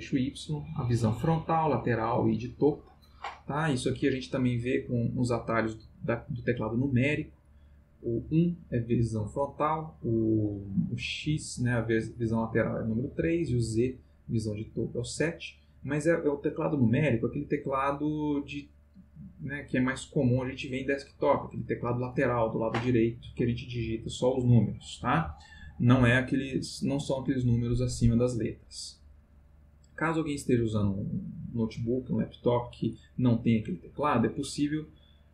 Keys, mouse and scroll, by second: 35.2 click.